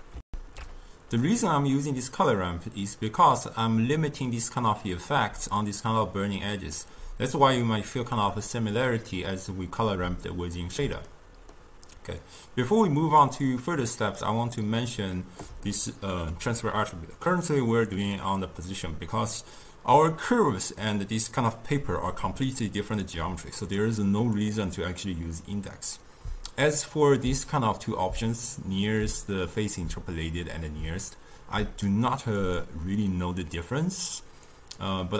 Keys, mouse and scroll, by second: 0.3 ctrl+alt+shift+q, 5.4 d, 5.7-6.8 drag, 6.8 d, 9.6 d, 11.1-12.3 middle drag, 12.3 click, 13.1 click, 13.5-14.8 drag, 15.8-18.9 ctrl+middle drag, 22.5 d, 22.6 right click, 23.1 d, 24.4-27.6 drag, 33.5-35.1 drag.